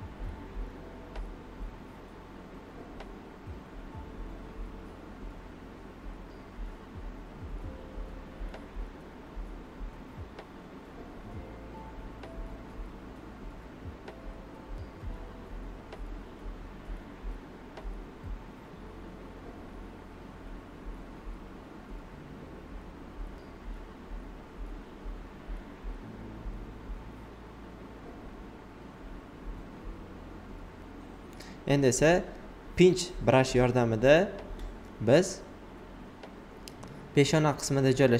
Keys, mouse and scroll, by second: 1.0 alt+click, 2.5 ctrl+z, 4.3 typing, 4.7 alt+right click, 6.2 click, 6.9 shift+click, 8.1 alt+right click, 8.6-10.0 typing, 9.6 click, 10.3 alt+right click, 11.0 shift+d, 12.0 click, 12.9-17.5 shift+drag, 13.2 typing, 17.5 alt+right click, 22.3 alt+right click, 23.4 click, 25.7 shift+click, 28.3-31.2 shift+drag, 31.2 b, 32.5-32.9 typing, 33.7 click, 33.7-38.1 drag.